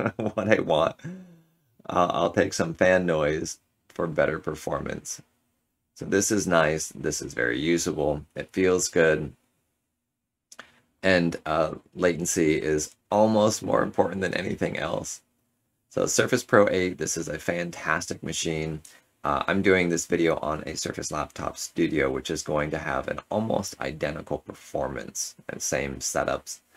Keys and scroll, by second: 6.3 ctrl+z.